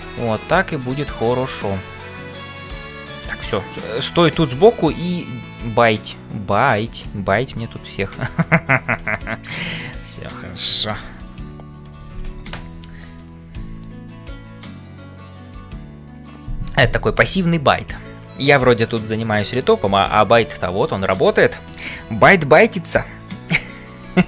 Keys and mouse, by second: 0.0 ctrl+space, 1.6 middle click, 2.1 middle click, 3.5 middle click, 4.8 shift+middle click, 6.0 ctrl+middle click, 7.9 n, 10.2 middle click, 11.1 ctrl+s.